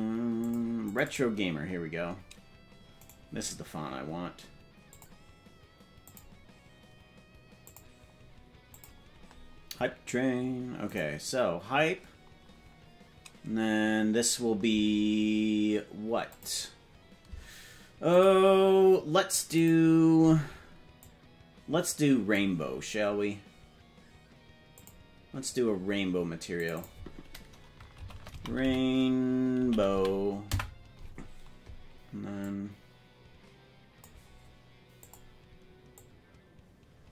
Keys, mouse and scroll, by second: 3.0 right click, 4.8 click, 6.0-7.7 drag, 10.9 right click, 16.3 click, 18.1 click, 19.5 click, 24.8 click, 26.7-31.1 drag, 32.4-34.1 drag, 35.1 click.